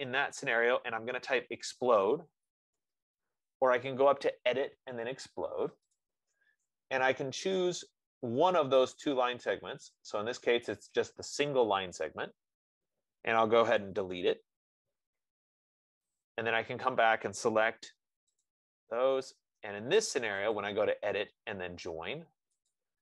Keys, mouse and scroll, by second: 1.4-3.7 typing, 6.3 click, 7.8 click, 12.5 click, 14.3 BackSpace, 16.4 click.